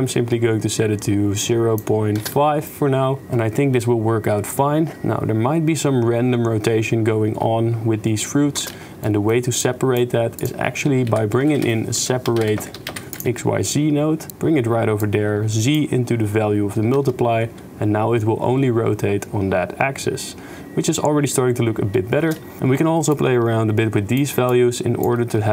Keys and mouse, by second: 2.2 shift+space, 3.2 shift+space, 8.7 shift+space, 9.0 click, 9.8 click, 10.4 click, 11.1 shift+a, 15.0-15.7 drag, 17.0 shift+space, 22.2 shift+space, 22.6 shift+space, 23.1-24.3 shift+drag, 24.5 shift+click, 25.1 shift+space.